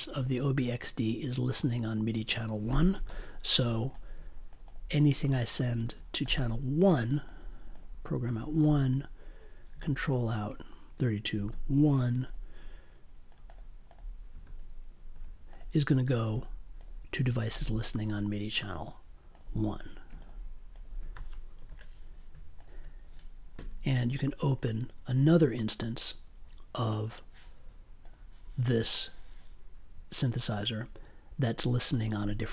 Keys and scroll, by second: 5.6 space, 5.8 1, 8.2 space, 8.3 1, 11.3 space, 11.5 1, 14.3 space, 15.1 1, 17.0 space, 17.2 1, 21.5 super+j.